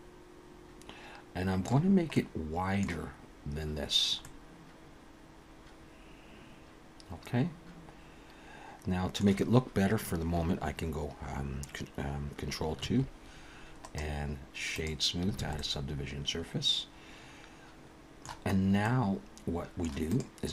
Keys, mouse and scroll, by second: 2.0 middle click, 4.2 middle click, 12.8 ctrl+2, 13.8 right click, 15.4 alt+a, 15.6 middle click, 18.5 scroll up 2, 18.8 middle click, 20.1 click.